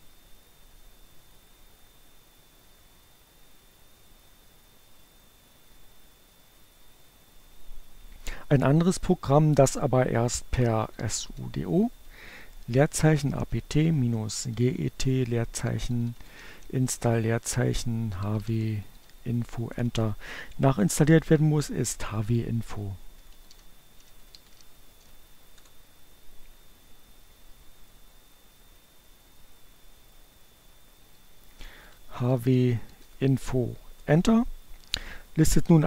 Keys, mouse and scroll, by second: 9.2-10.5 typing, 11.6-15.7 typing, 16.7-18.3 typing, 20.6 p, 21.9-23.9 typing, 24.3 Return, 30.3-32.2 typing, 32.6 Return.